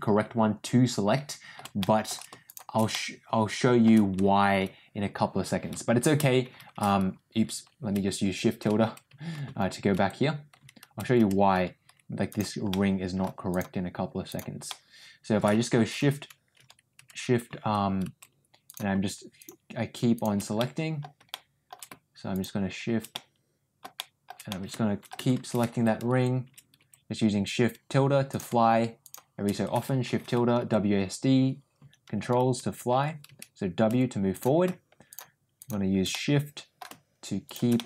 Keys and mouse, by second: 1.7 shift+middle click, 2.3 shift+click, 2.8 middle click, 12.6 middle click, 13.4 shift+click, 14.6-18.7 middle drag, 19.3 shift+click, 20.0 shift+click, 20.5 middle click, 21.2 shift+middle click, 23.1 middle click, 23.9 shift+middle click, 24.4 middle click, 29.0 shift+click, 35.0 shift+click, 35.5 shift+click, 36.0 middle click, 37.4 shift+click, 37.6 middle click.